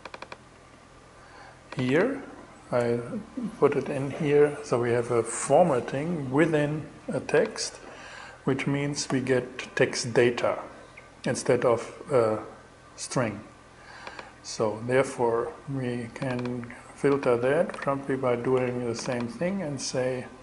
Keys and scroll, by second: 8.0 shift+super+e, 17.4 super+c, 17.9 super+v.